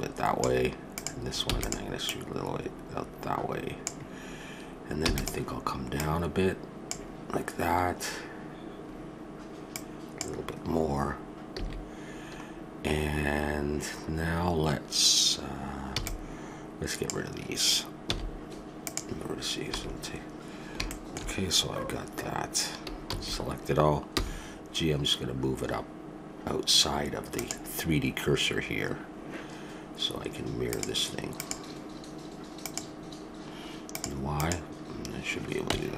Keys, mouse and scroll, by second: 1.4 e, 5.0 e, 5.9-7.6 drag, 9.7-11.5 drag, 11.6 a, 15.9 b, 18.1 x, 20.9 middle click, 23.0 a, 24.1 g, 30.1 middle click, 30.7-33.2 drag, 33.9-35.9 drag, 35.7 Tab.